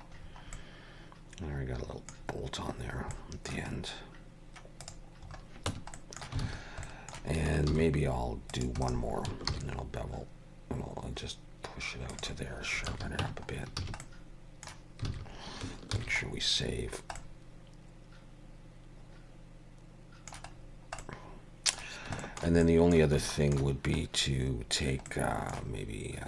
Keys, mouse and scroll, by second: 0.6 middle click, 2.3 scroll down 2, 2.8-3.2 scroll up 4, 3.2 middle click, 3.7 scroll up 2, 4.8 click, 5.3 scroll up 2, 5.7 Tab, 6.0 middle click, 6.5 alt+a, 6.9 middle click, 7.7 ctrl+r, 9.5 ctrl+b, 12.9 alt+a, 13.2 Tab, 13.6 scroll down 2, 13.8 a, 14.0 middle click, 15.1 alt+a, 16.0 ctrl+s, 16.3-17.0 scroll down 4, 17.2 middle click, 20.6-21.0 scroll down 3, 21.0 middle click, 22.2 shift+middle click, 22.6 middle click, 23.3 shift+middle click, 25.1 middle click.